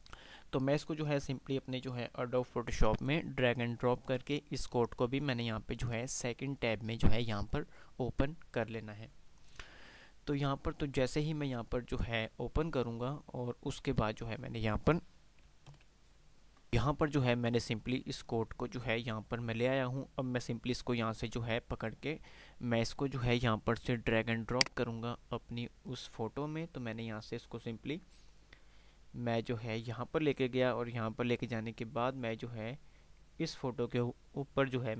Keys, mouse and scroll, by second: 5.2-6.2 typing, 15.9 ctrl+F10, 16.9 click, 17.2 typing, 27.3-34.6 drag.